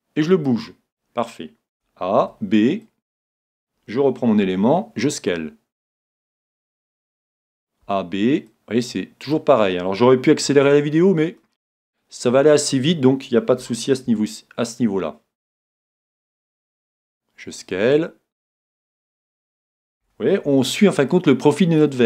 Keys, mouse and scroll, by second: 0.5-2.3 drag, 1.7 a, 2.3 b, 4.4 s, 6.0-7.7 drag, 6.3-7.9 middle drag, 7.4 a, 7.8 b, 7.9 click, 10.5 s, 12.6-14.4 drag, 13.6 a, 14.1 b, 16.7 s, 19.1-20.9 drag, 20.0 a, 20.5 b.